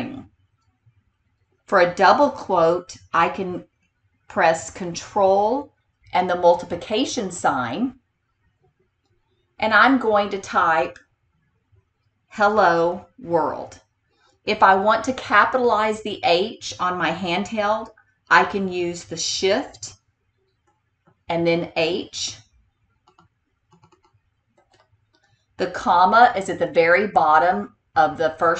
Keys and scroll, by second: 20.8 h, 23.2 e, 23.8 l, 24.7 o, 26.7 ,.